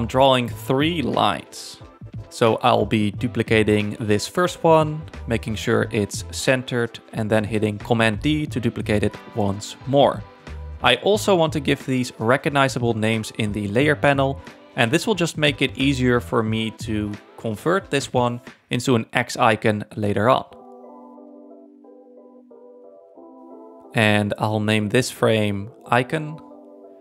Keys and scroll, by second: 2.2 alt+Down, 3.4 super+d, 4.1 shift+Down, 9.2 super+d, 12.9-14.0 typing, 15.3-16.2 typing, 17.8-18.8 typing, 19.2 Return.